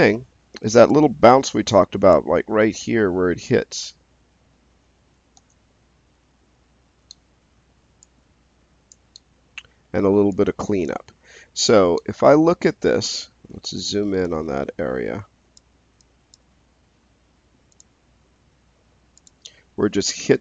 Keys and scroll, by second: 5.3 space.